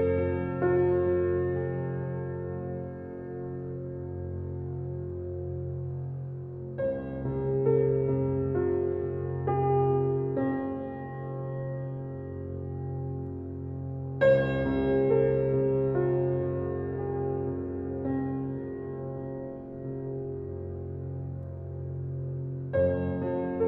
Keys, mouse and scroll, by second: 0.2-1.1 middle drag, 1.1 scroll down 3, 1.6-2.4 middle drag, 2.4 click, 3.3 click, 3.7-4.3 drag, 8.0 click, 8.9 click, 9.3 Tab, 9.7-10.3 alt+scroll up 2, 9.9 alt+middle click, 10.5 shift+middle click, 11.2 alt+z, 11.7 alt+z, 12.0 click, 13.4-15.4 drag, 15.4 Tab, 15.7 Tab, 16.1 Tab, 16.3 Tab, 16.9 click, 17.1 Tab, 17.5-17.8 middle drag, 17.8-18.2 scroll down 9, 18.5-21.0 shift+middle drag, 21.0 Tab, 21.2 Tab, 21.5 click, 21.7 scroll down 2, 22.1-23.2 middle drag, 23.2 click.